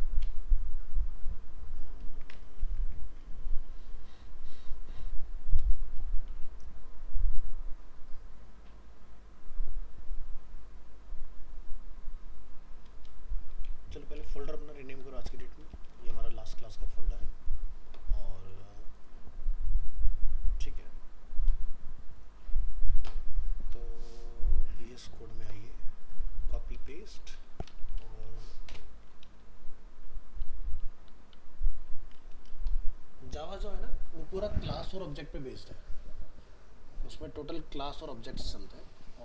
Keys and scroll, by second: 2.6 alt+f, 2.7 alt+移, 15.6 ctrl+s, 15.9 ctrl+w, 26.6 ctrl+c, 26.8 ctrl+v.